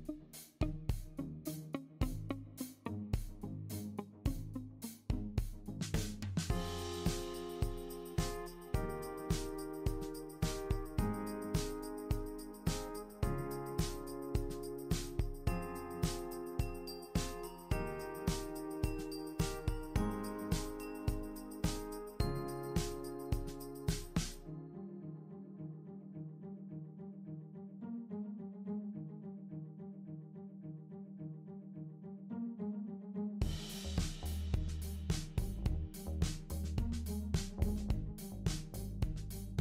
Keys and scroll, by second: 1.9 BackSpace, 16.2 super+d, 22.2 super+d, 22.5 super+d, 23.0 super+d, 27.8 super+c, 28.2 super+v, 32.3 super+c, 32.5 super+v, 38.1 d.